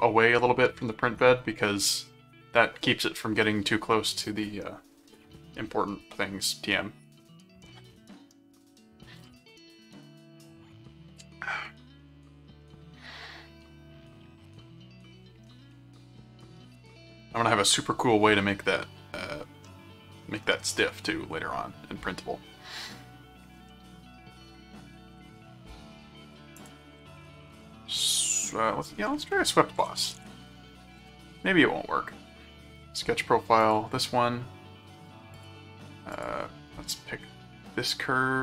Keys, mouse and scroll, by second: 12.6-17.3 middle drag, 19.6 middle click, 23.7-25.3 middle drag, 26.0 middle click, 26.6 click, 26.8-28.1 typing, 29.5-30.7 typing, 31.0 Return, 33.6 click, 35.3 click, 36.1 click.